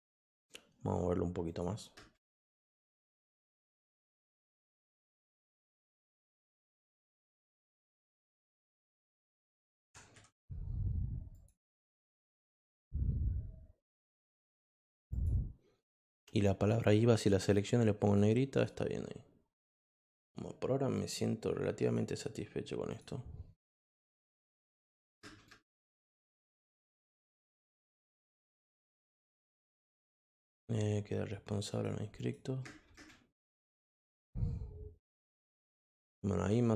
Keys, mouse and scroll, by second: 1.4 click, 1.9 space, 3.9 click, 5.9 click, 7.2 click, 11.3 click, 15.1 click, 16.6 click, 18.0 click, 18.5 click, 20.9 click, 21.8 click, 22.9 click, 24.5 click, 25.2 space, 26.0 click, 26.9-28.0 drag, 28.8 click, 31.7 click, 32.1 click, 32.6 space, 33.0 space, 33.4 click, 35.3 click.